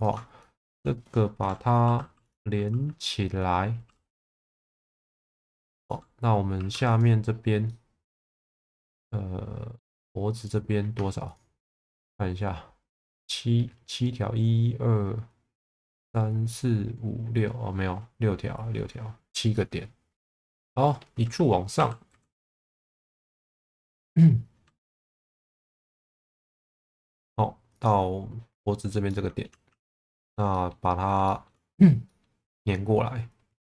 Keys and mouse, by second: 0.6 shift+click, 4.5 f, 5.5 shift+middle click, 6.5 2, 7.6 middle click, 8.6-9.8 middle drag, 10.3 click, 11.2 ctrl+click, 19.6 middle click, 20.4 middle click, 21.7 e, 22.1 z, 23.4 middle click, 25.7 g, 25.8 b, 26.4 click, 26.6 z, 27.7 click, 29.0 middle click, 29.7 1, 30.6 middle click, 31.2 shift+middle click, 32.0 middle click.